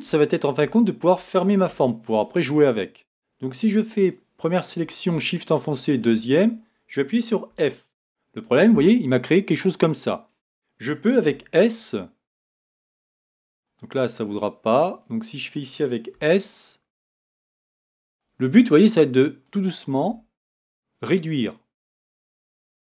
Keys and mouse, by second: 0.3 middle click, 1.6 Tab, 3.8-4.8 right drag, 7.5 f, 10.4 middle click, 11.3 s, 16.1 s, 20.1 s.